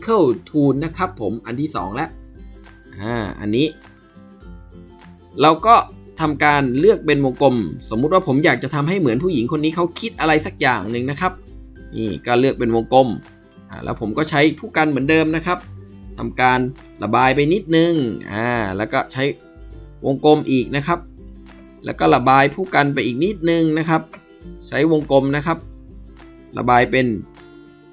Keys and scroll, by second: 3.2 ctrl+b, 15.5 ], 15.7 ], 22.2 b.